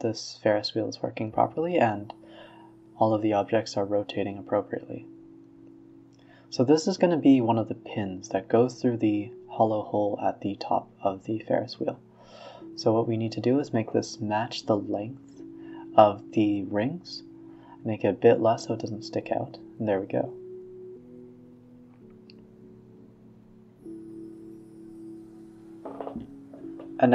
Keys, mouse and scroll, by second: 1.4 shift+a, 2.6-4.4 middle drag, 4.9-5.6 scroll up 1, 5.6-6.4 middle drag, 6.4-6.7 scroll up 3, 6.7 s, 7.8 s, 8.8-9.4 middle drag, 9.4-9.9 scroll down 4, 9.9-13.1 typing, 10.7-11.0 scroll down 12, 13.7 middle click, 14.2 s, 15.0-16.8 middle drag, 17.4 drag, 17.6 s, 19.2-19.7 middle drag, 19.7 click, 19.9 s, 20.8-22.0 middle drag, 22.0 Tab, 22.3-23.0 middle drag, 23.0 ctrl+r, 24.6 middle click, 25.3 ctrl+r, 27.0 click.